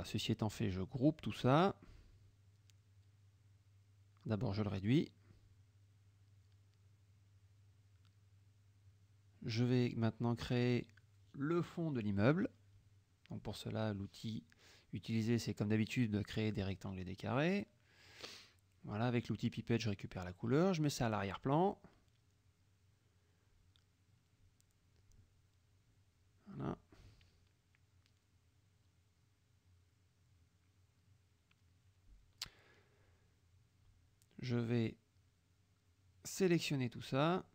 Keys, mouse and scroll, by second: 0.2-1.5 drag, 2.2 KP_Subtract, 2.9 middle click, 3.7-4.4 drag, 5.0-6.5 ctrl+drag, 8.7 click, 12.1-14.7 drag, 15.4-17.3 drag, 18.1 F7, 19.0 click, 19.4 F1, 20.6 click, 21.1 click, 24.2 middle click, 26.0 F7, 26.6 click, 27.8 click, 33.6 click, 34.8 F1, 36.0 click, 37.2 shift+click.